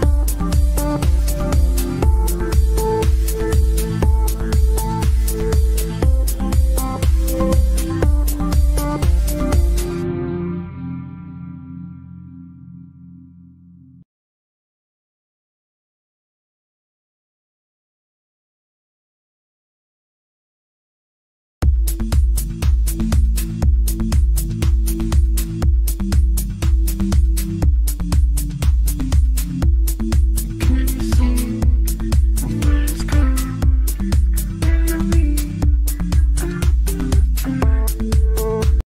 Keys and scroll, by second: 6.8 shift+F2, 11.6 F3, 11.7 Escape, 12.9 Escape, 14.6 Caps_Lock, 14.8 g, 15.1 i, 15.1 n, 15.2 g, 16.5 ctrl+r, 18.9 Delete, 19.6 shift+F2, 20.0 F9, 22.4 Escape, 28.0 F3, 31.9 F9.